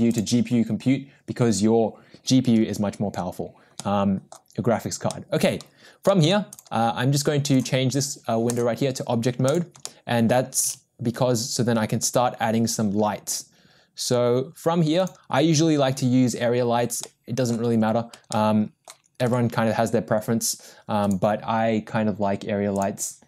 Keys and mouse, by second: 3.8-4.5 middle drag, 5.3 middle drag, 7.6-8.7 drag, 9.9 middle click, 10.8 shift+a, 18.8 click, 19.3 g.